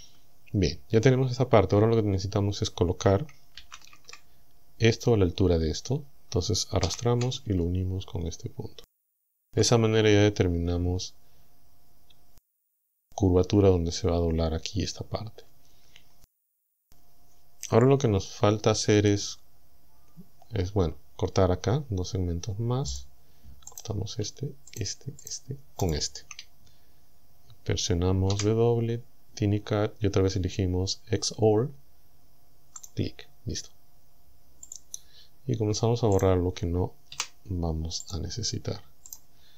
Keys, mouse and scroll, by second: 3.6 ctrl+l, 6.9 g, 9.1 ctrl+click, 23.0 click, 23.7 right click, 24.7 shift+right click, 25.3 shift+right click, 25.9 shift+right click, 28.3 w, 32.8 click, 34.7 click, 36.2 right click, 37.1 Delete, 38.1 click, 39.1 right click.